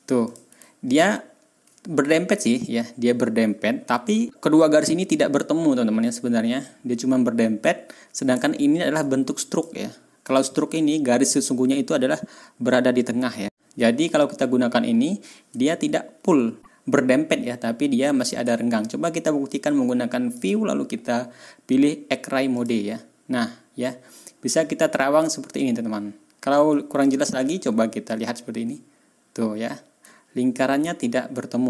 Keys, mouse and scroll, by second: 0.2 middle click, 0.6-1.4 ctrl+scroll down 2, 2.1-2.4 ctrl+scroll up 2, 3.8-4.2 ctrl+scroll up 4, 9.5 click, 10.2 click, 11.0-11.9 ctrl+scroll up 4, 15.7-16.0 ctrl+scroll down 2, 20.3 click, 22.5 click, 26.9 ctrl+scroll down 1, 28.1-28.5 ctrl+scroll down 1, 30.1-30.7 ctrl+scroll up 4.